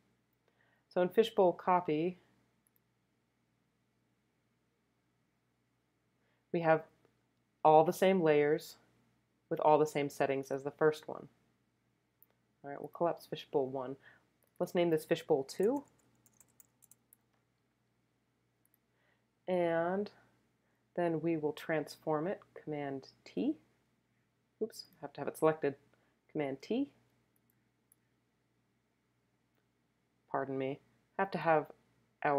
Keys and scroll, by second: 15.3-17.5 typing, 23.3 super+t, 26.3 super+t, 27.5 shift+t.